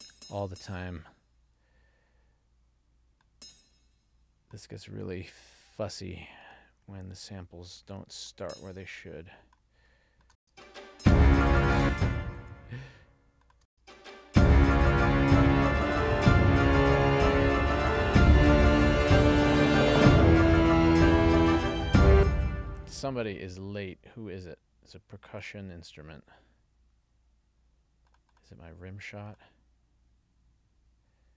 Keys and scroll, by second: 10.5 space, 11.9 space, 12.6 super+z, 13.8 space, 22.2 space.